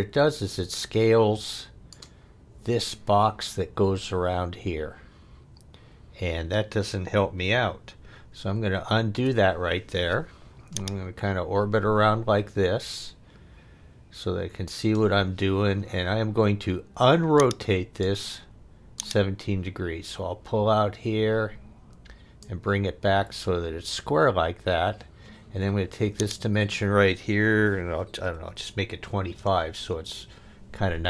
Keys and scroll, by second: 8.5 super+z, 28.0-29.0 typing, 29.4 Return.